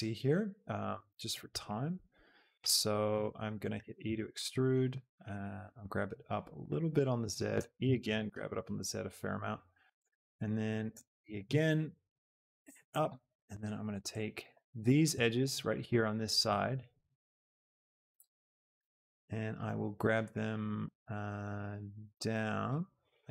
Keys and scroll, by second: 3.6 shift+e, 4.0 Escape, 7.6 e, 10.9 e, 11.3 Escape, 18.6 shift+Escape.